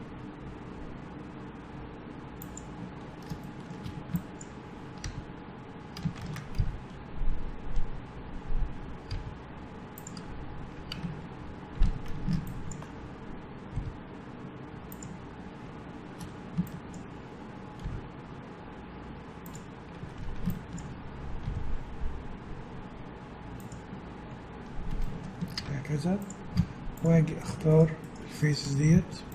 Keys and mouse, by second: 3.4 middle click, 4.2-6.0 drag, 4.2 a, 5.0 f, 6.2 ctrl+z, 6.6 g, 10.6-12.5 middle drag, 12.5 a, 13.7 g, 16.2 a, 16.7-18.5 drag, 17.9 g, 18.5-19.9 middle drag, 20.0 a, 20.5-22.5 drag, 21.5 g, 25.6 ctrl+Tab, 26.6 z, 28.9 z.